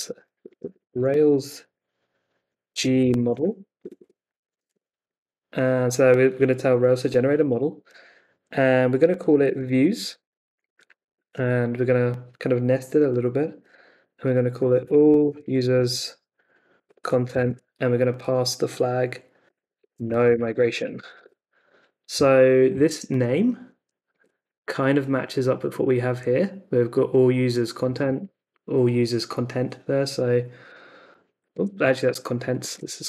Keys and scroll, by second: 0.0-1.4 typing, 2.4-4.9 typing, 9.1-11.1 typing, 14.3-17.9 typing, 19.5-21.6 typing, 24.1 super+Tab, 27.9 super+Tab, 31.5 super+Tab.